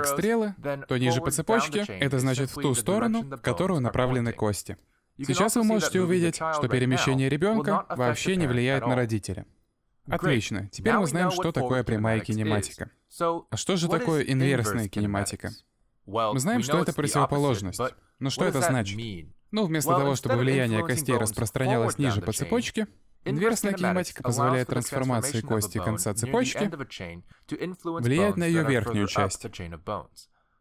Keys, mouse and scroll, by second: 0.8 shift+middle click, 2.1 click, 2.4 r, 3.3 middle click, 5.6 middle click, 6.5 shift+middle click, 6.9 r, 8.0 g, 8.7 r, 9.8 s, 10.8 middle click, 12.5 a, 13.2 alt+r, 13.8 shift+middle click, 14.2 middle click, 14.7 ctrl+s, 15.0 shift+middle click, 15.8 middle click, 21.9 shift+middle click, 22.6-23.0 scroll up 2, 23.0 middle click, 25.3 right click, 26.5 click, 28.2 g.